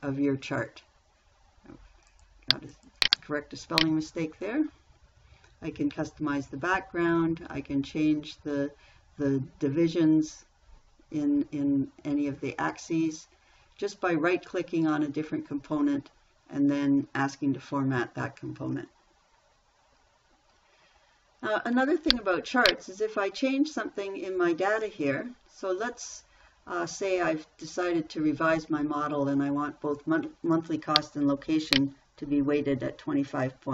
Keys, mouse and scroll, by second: 4.2 Delete, 32.8-33.7 typing.